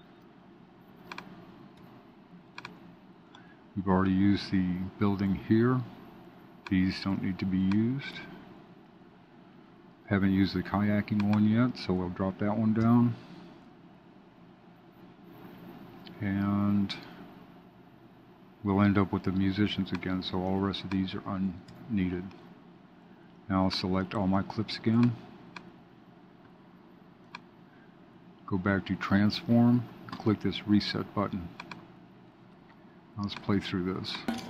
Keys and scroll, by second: 12.7 alt+super+Down.